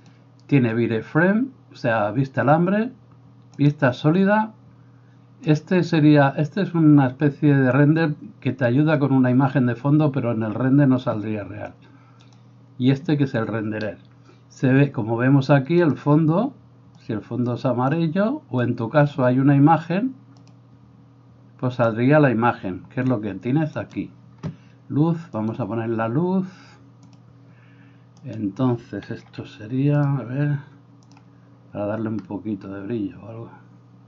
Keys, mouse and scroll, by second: 23.8 right click, 25.5 click, 27.1 click, 28.3 right click, 29.3 s, 31.2-34.0 drag.